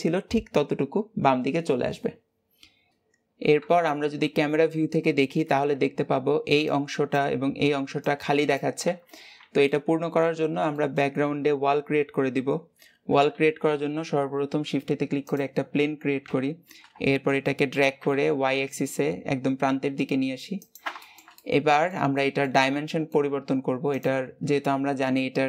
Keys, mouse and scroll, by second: 2.9 shift+middle click, 3.4 KP_0, 9.4 middle click, 10.2-10.6 scroll down 1, 10.6-15.2 shift+middle drag, 15.2 shift+a, 16.1 KP_7, 17.3 shift+middle click, 17.6 g, 20.8-22.4 shift+middle drag, 22.4 scroll up 2, 22.6-25.4 shift+middle drag.